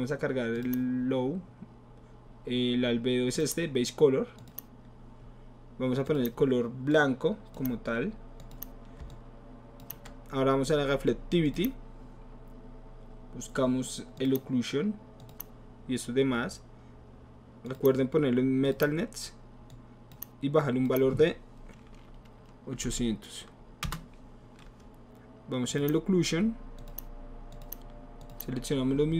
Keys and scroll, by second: 22.9 KP_8, 23.8 Return.